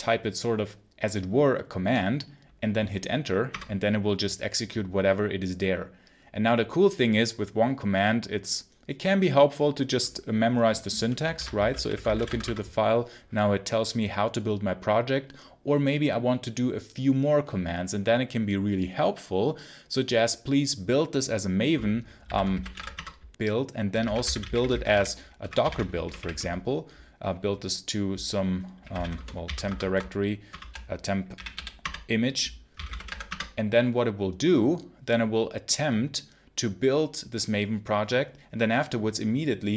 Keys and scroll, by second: 3.4 Return, 11.2-12.5 typing, 21.9-26.6 typing, 28.4-33.3 typing.